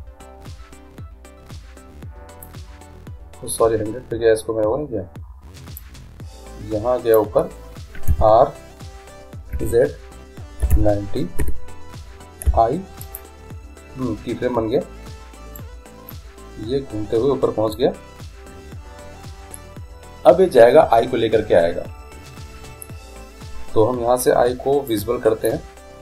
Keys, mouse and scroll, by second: 5.9-7.6 drag, 8.1 r, 12.5 i, 15.7-17.4 drag, 25.0-26.0 drag.